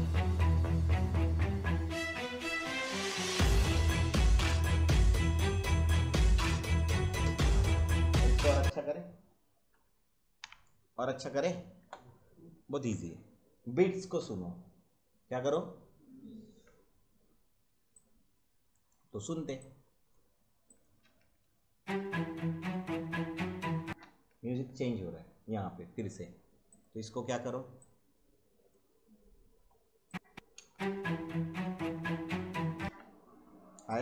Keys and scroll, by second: 8.6 space, 10.4 `, 21.0 space, 23.8 space, 30.5 space, 32.8 space.